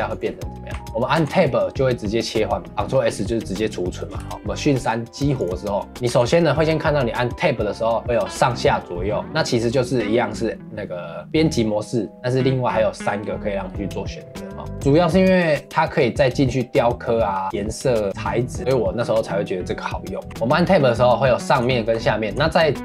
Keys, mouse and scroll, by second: 0.7 Tab, 0.9 Tab, 1.2 Tab, 2.7 ctrl+s, 4.2 shift+middle click, 4.3-5.9 drag, 5.9 Tab, 14.6 Tab, 20.3 Tab.